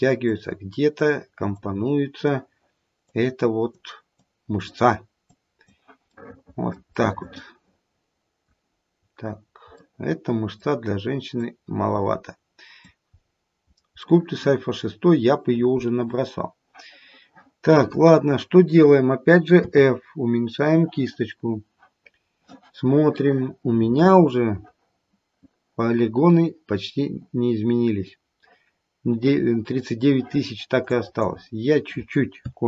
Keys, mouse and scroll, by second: 0.3 click, 1.5 click, 3.1 click, 4.2 click, 5.2 click, 6.5 middle click, 7.0 middle click, 8.2 middle click, 8.7-11.3 scroll down 6, 9.7 middle click, 12.6 click, 13.2-14.3 scroll up 6, 14.0 middle click, 19.6 f, 30.9 click.